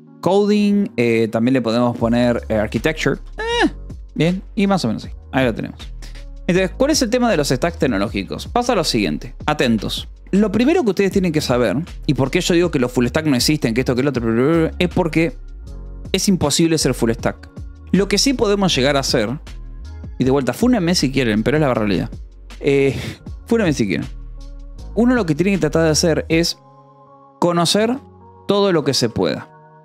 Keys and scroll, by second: 2.7-5.3 typing, 3.5 Escape, 6.6 Escape, 7.0 j, 7.7 o, 8.1 Return.